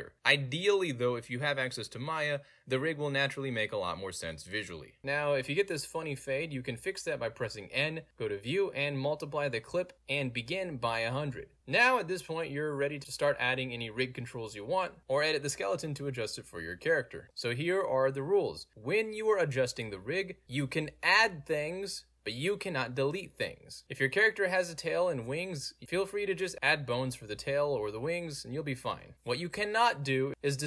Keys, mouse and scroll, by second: 0.5 right click, 1.3 click, 1.8 click, 2.1 click, 2.5 right click, 2.6 click, 3.2 middle click, 3.6 click, 4.8 right click, 5.0 Delete, 7.4 n, 8.3 click, 9.2 click, 9.5 8, 9.7 0, 10.0 Return, 10.3 click, 10.5 Right, 10.5 space, 10.7 1, 10.8 Return, 11.5 click, 12.5 n, 13.6-14.1 middle drag, 14.2-14.5 middle drag, 14.9 click, 17.2 End, 19.0 Tab, 20.1 middle click, 20.2 scroll up 2, 20.4 Page_Down, 20.8 middle click, 20.9 scroll up 2, 21.2 shift+middle click, 21.5 middle click, 22.5 click, 23.3 Page_Down, 23.7 middle click, 23.7 scroll up 2, 24.1 shift+middle click, 24.9 e, 25.0 click, 25.2 click, 25.3 g, 25.8 click, 25.9 click, 26.0 g, 26.4 click, 26.5 middle click, 26.5 scroll down 2, 27.1 g, 27.4 click, 27.5 click, 27.6 right click, 27.9 click, 28.1 right click, 28.2 click, 28.4 right click, 28.5 click, 28.6 click, 29.0 middle click, 29.1-29.5 scroll down 3, 29.5-30.6 middle drag.